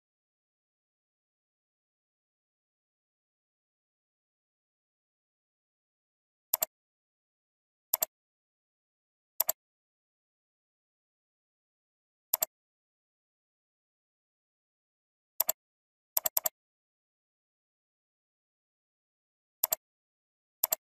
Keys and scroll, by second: 6.1 ctrl+c.